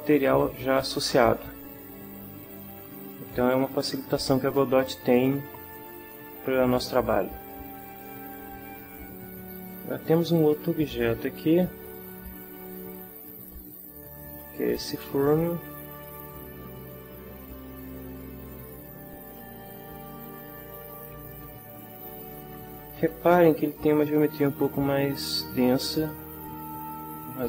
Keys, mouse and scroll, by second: 11.9 shift+click, 12.6 click, 13.6 shift+middle click, 15.3 click, 16.3 click, 17.8 shift+click, 18.4 shift+click, 19.3 shift+click, 20.1-21.2 shift+middle drag, 22.1 right click, 23.7 Tab, 25.0 Tab, 25.4 right click, 25.9 Tab, 27.1 Tab.